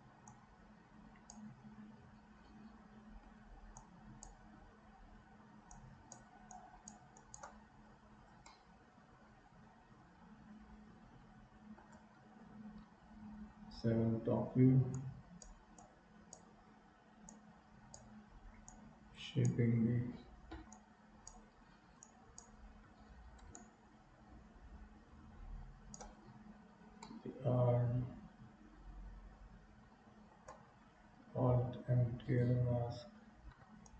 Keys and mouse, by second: 0.4-1.4 drag, 3.9 click, 5.8 click, 6.7 click, 7.3 click, 8.6-11.9 middle drag, 13.0 KP_7, 15.0 right click, 15.8 right click, 17.3 right click, 18.7 right click, 20.8 right click, 22.0 right click, 23.6-26.0 shift+right drag, 27.1-30.3 middle drag, 31.7 alt+m, 33.6 i.